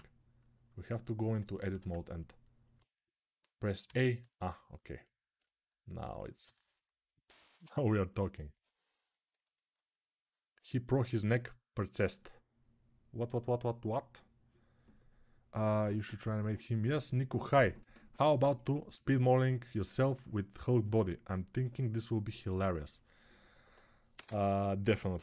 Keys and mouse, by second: 3.6 a, 6.9-25.2 middle drag.